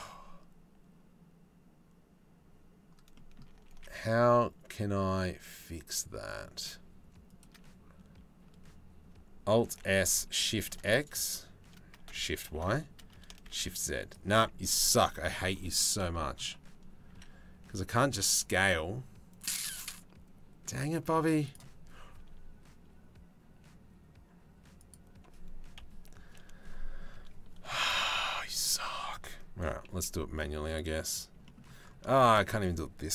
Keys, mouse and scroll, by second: 3.4 alt+s, 9.2 alt+s, 16.7 s, 19.0-21.2 drag, 21.8 s, 25.4 KP_3, 28.0 3, 29.5 c, 31.7 shift+click.